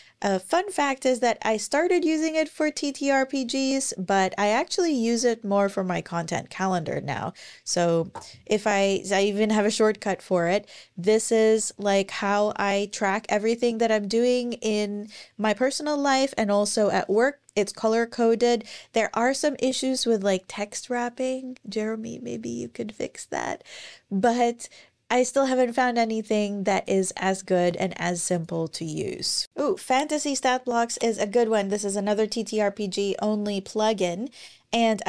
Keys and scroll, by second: 6.5 Escape, 7.8 shift+super+c.